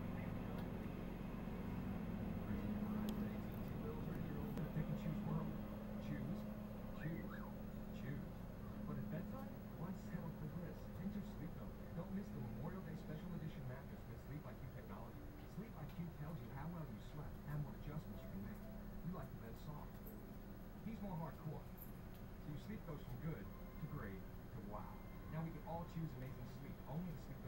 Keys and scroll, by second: 15.5 ], 16.5 ].